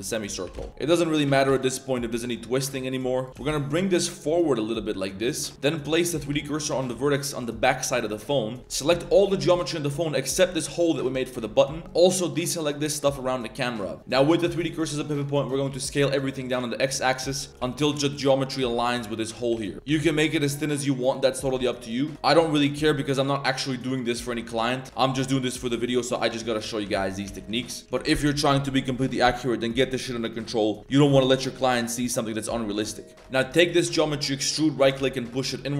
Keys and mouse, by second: 0.1 ctrl+click, 0.4 s, 0.7 g, 1.2 g, 6.1 click, 6.3 shift+s, 6.9 z, 7.0 middle drag, 7.2 click, 7.3 z, 7.9 click, 8.6 ctrl+z, 9.0 shift+middle drag, 9.2 a, 10.4 alt+shift+click, 11.2 shift+click, 11.7 shift+click, 11.9 alt+shift+click, 12.2 alt+shift+click, 12.6 alt+shift+click, 13.0-14.0 drag, 14.0 z, 14.6 middle click, 15.1 middle click, 15.6 s, 17.1 middle click, 17.5 ctrl+z, 17.5 s, 17.6 s, 19.5 s, 19.8 s, 21.8 alt+click, 22.1 alt+click, 22.5 g, 24.0 click, 24.6 shift+click, 24.8 shift+s, 24.9 middle click, 25.5 right click, 25.9 right click, 26.2 right click, 26.6 right drag, 27.1 shift+middle click, 27.3 shift+s, 27.6 shift+middle click, 33.2 shift+middle click, 33.6 e, 34.8 g.